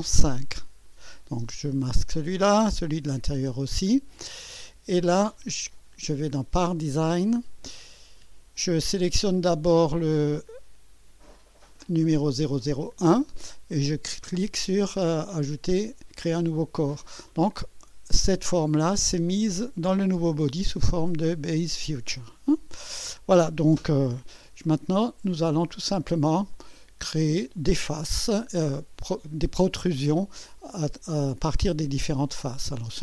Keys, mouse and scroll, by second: 0.8 click, 1.6 space, 2.6 click, 3.4 space, 4.3-5.1 drag, 6.3 click, 7.0 click, 8.6 click, 11.8 click, 16.5 click, 23.9 click, 23.9 KP_2, 24.6-25.5 drag, 25.6 scroll up 1, 26.2 scroll down 1, 26.5-27.3 drag, 27.6 click, 29.4-30.3 typing, 29.7 click, 31.3 click, 32.1 click.